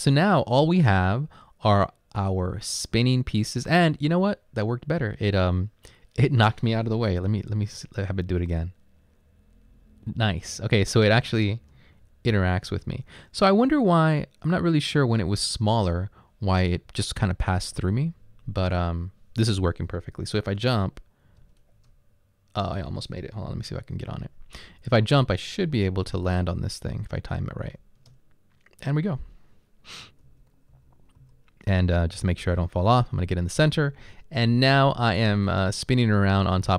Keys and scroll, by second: 7.3 Down, 7.4 Down, 7.7 Down, 11.1 Left, 11.7 Left, 12.3 Up, 13.0 Right, 13.5 Right, 13.5 Right, 13.6 Right, 13.7 Right, 21.5 space, 23.5 Down, 27.8 space, 30.3 Left, 30.8 Up, 31.2 Left, 32.2 Down.